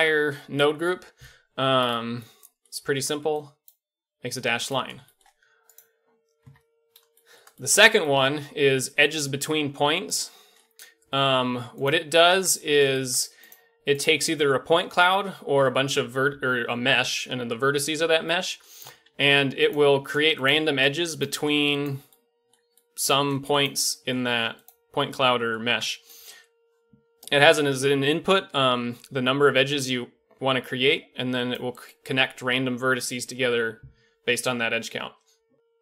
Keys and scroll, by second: 6.4 KP_Decimal, 12.3 Tab, 19.0 shift+d, 20.0 shift+d, 20.7 shift+d, 21.3 shift+d, 23.2 shift+d, 24.2 shift+d, 25.6 Tab.